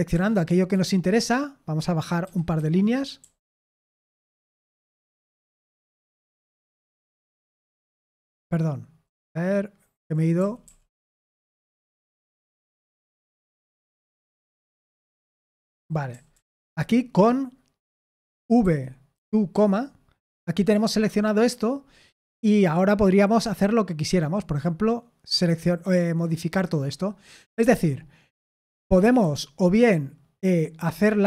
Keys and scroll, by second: 0.1-0.7 typing, 2.0-4.5 typing, 6.1 Escape, 6.5-11.0 typing, 13.6-16.5 typing, 18.6-19.5 typing, 28.7 Escape, 29.2-30.5 h.